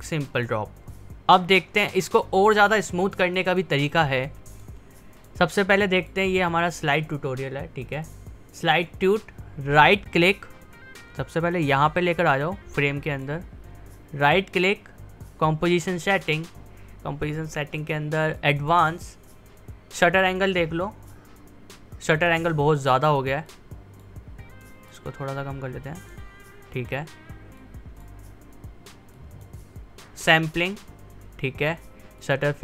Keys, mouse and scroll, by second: 10.4 typing, 11.4-14.2 drag, 14.2 right click, 16.1 click, 18.3 click, 20.5-23.4 drag, 23.4-29.1 drag, 32.1 click.